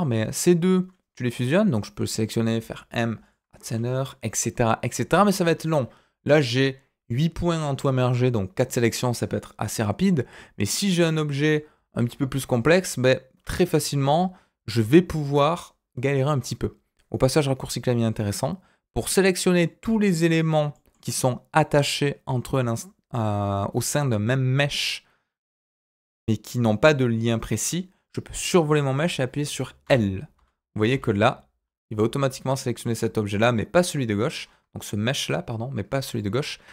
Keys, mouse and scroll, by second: 2.5 m, 5.1 ctrl+z, 10.6-11.3 scroll down 1, 11.3 middle click, 12.0 alt+a, 13.4 z, 14.8 z, 18.1-19.5 middle drag, 20.7 middle click, 20.9-24.0 scroll up 2, 30.3 l, 30.9 l, 32.8 middle click, 34.0-34.4 scroll up 2, 34.4-36.0 scroll down 1, 36.1 shift+middle click, 36.4-36.7 scroll up 1.